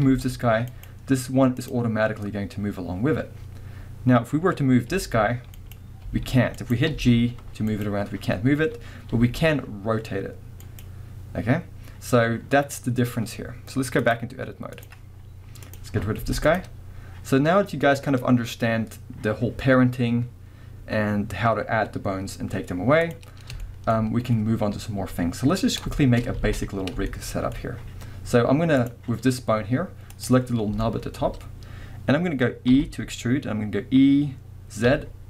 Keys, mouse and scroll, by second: 0.1 g, 0.9 right click, 1.6 click, 4.9 g, 5.7 right click, 6.0 g, 6.7 right click, 6.9 g, 7.9 right click, 9.1 r, 10.8 right click, 14.1-15.7 drag, 15.2 scroll down 1, 15.9 scroll up 1, 16.2 x, 16.9-18.2 scroll down 1, 18.3-22.3 scroll up 1, 23.1 click, 23.3 scroll up 1, 23.6-28.8 shift+middle drag, 24.1-25.6 scroll up 2, 25.6-25.9 scroll down 2, 26.3 scroll up 1, 26.4 alt+a, 28.8 click, 30.1 click, 30.8-35.2 shift+middle drag, 32.7 e.